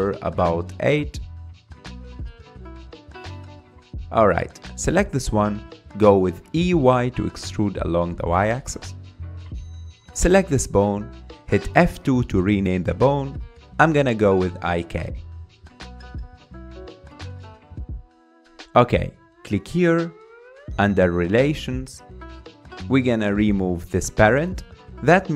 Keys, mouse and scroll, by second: 1.5 KP_3, 2.2 scroll up 2, 2.4 shift+middle click, 3.4 click, 3.8 scroll up 3, 4.1 shift+middle click, 4.7 click, 6.6 e, 10.6 click, 12.4 F2, 21.4 click, 24.7 click.